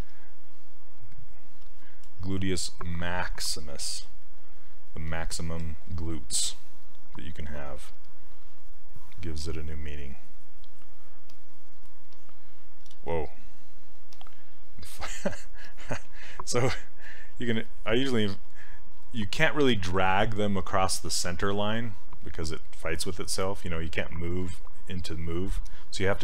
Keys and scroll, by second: 13.0 ctrl+z, 15.2 ctrl+z, 16.1 s, 17.4 s.